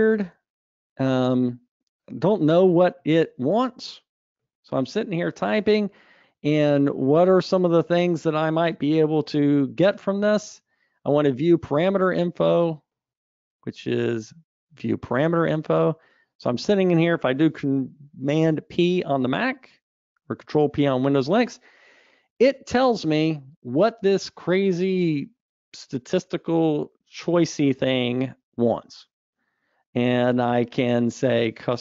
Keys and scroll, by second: 19.5 super+p.